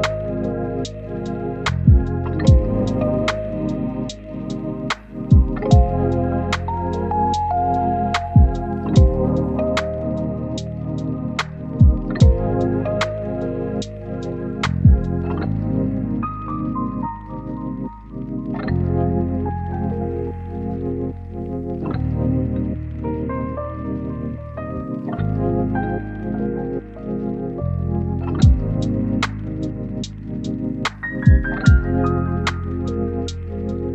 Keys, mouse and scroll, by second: 1.5 click, 3.3 scroll down 1, 3.4-4.2 scroll up 1, 4.2 click, 7.6-7.9 scroll up 1, 7.9-9.3 drag, 11.2 scroll down 1, 11.4-11.9 scroll up 1, 11.9-16.9 drag, 17.1 scroll down 1, 17.2 scroll up 1, 17.5 right click, 17.8 click, 19.2 scroll down 1, 19.4-19.7 scroll up 1, 19.7 click, 21.1 scroll down 1, 21.2-22.0 scroll up 1, 22.0-25.0 drag, 25.2 right click, 25.5 scroll up 1, 25.6 click, 26.5 right click, 26.9 click, 27.3 right click, 27.6 scroll up 1, 27.8-30.9 drag, 30.9 scroll down 1, 31.0-31.7 scroll up 2, 31.2 click, 31.7 click, 32.7 scroll down 1, 32.8-33.6 scroll up 2, 32.9 right click, 33.6 click.